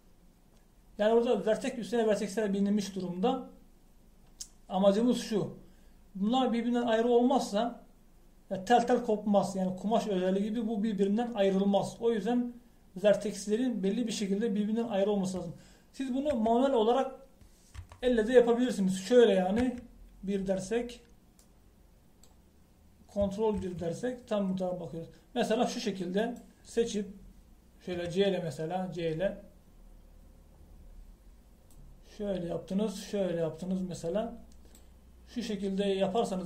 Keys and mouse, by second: 1.1 middle click, 17.4 KP_1, 18.8 KP_3, 20.7 KP_1, 24.6 ctrl+KP_1, 27.2 middle click, 28.2 middle click, 29.0 c.